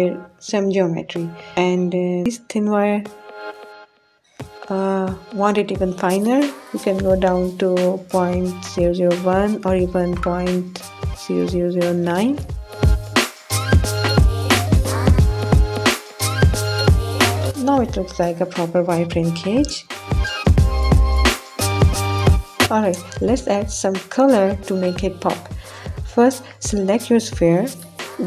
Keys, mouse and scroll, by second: 2.2 click, 4.0-5.5 drag, 9.0-11.7 drag, 12.2-17.0 drag, 14.5 0, 16.3 0.